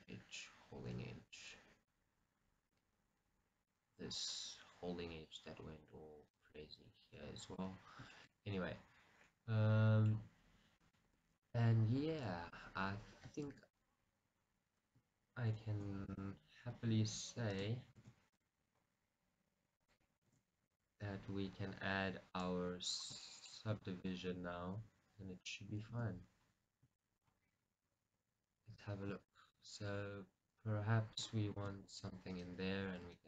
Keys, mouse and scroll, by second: 0.7 scroll, 3.1-3.7 scroll, 3.7 middle click, 7.8 scroll, 8.2 shift+middle click, 8.9-12.0 middle drag, 12.1-14.1 middle drag, 12.1-12.4 scroll down 2, 13.7 z, 17.7-23.3 middle drag, 23.5 shift+middle click, 26.5-30.1 middle drag, 26.5 scroll down 2, 29.9 scroll, 32.5-33.2 middle drag.